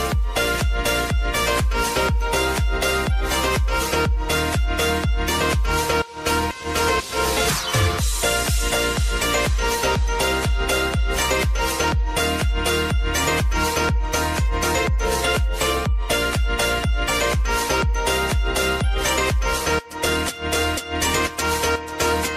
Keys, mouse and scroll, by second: 0.4 u, 1.4 click, 1.8 u, 2.2 click, 2.4 space, 4.8 click, 4.9 u, 5.6 ctrl+a, 6.3 ctrl+d, 7.7 click, 8.1 space, 9.1 [, 9.7 space, 10.9 ctrl+d, 11.7 [, 12.3 space, 13.5 ctrl+d, 14.0 [, 15.4 space, 16.8 click, 17.1 click, 18.0 t, 19.5 click, 20.3 Return.